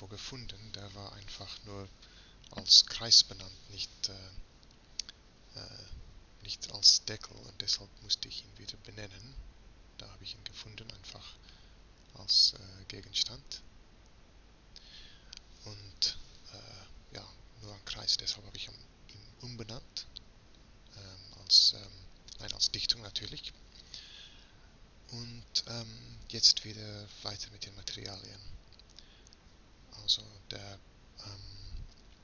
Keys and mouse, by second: 4.9 Tab, 5.9 z, 12.2 Tab, 27.7 shift+z, 29.5 click, 30.0-32.2 drag.